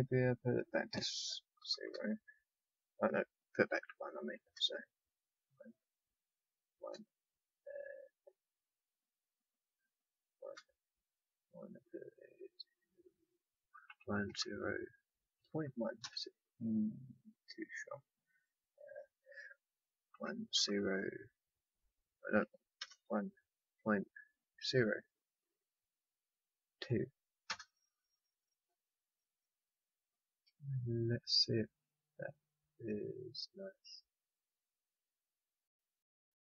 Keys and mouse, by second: 32.0-33.6 drag.